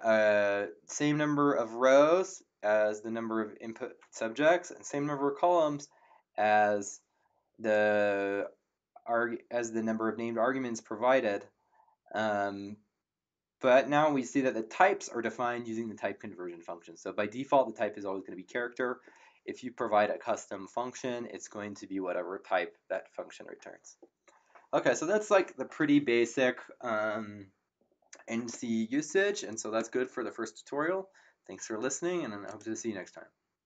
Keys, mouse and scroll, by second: 32.5 click.